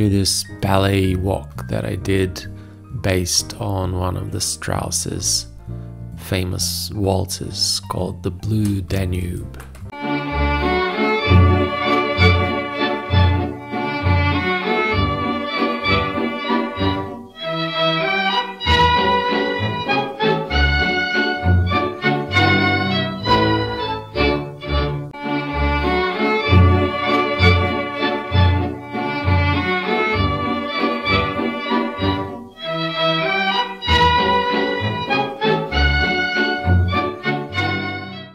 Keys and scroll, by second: 3.7 space, 7.6 Return.